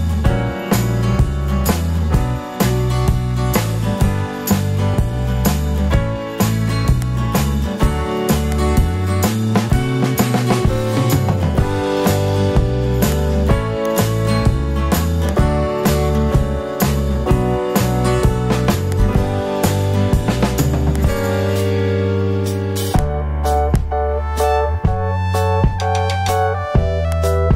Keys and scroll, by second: 25.1 alt+super+z, 27.2 alt+super+z.